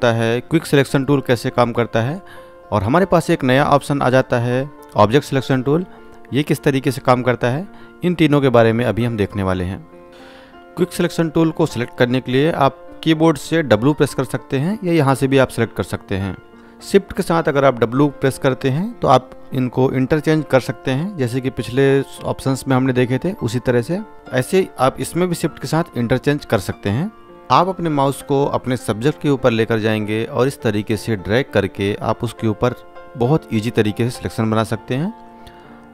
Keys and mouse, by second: 2.1 right click, 28.5 shift+Num_Lock, 30.1-33.8 drag.